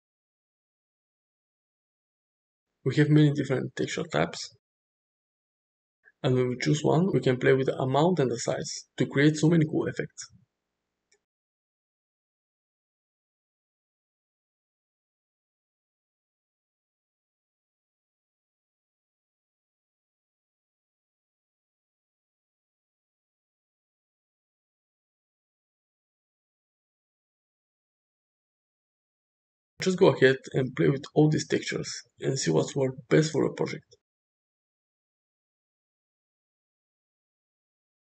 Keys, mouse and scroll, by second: 4.0-5.1 drag, 7.7-11.2 drag, 11.4 space, 13.2-14.1 middle drag, 14.7 middle click, 14.8 drag, 15.1-15.7 middle drag, 16.3-17.5 middle drag, 18.4-19.2 middle drag, 21.0-23.6 drag, 26.0 space, 26.7-28.0 drag, 28.7 space, 30.2-34.3 drag.